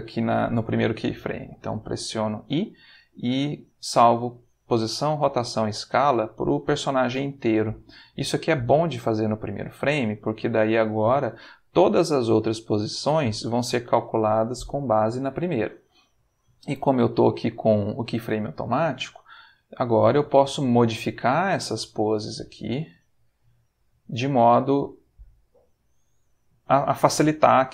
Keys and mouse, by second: 1.4 i, 4.6 click, 6.3-8.1 middle drag, 10.7 middle click, 18.5 ctrl+middle click, 19.3-20.7 ctrl+shift+middle drag, 21.4 click, 22.1 r, 23.2 click, 23.9 click, 24.2 r, 25.7 click, 26.5 click.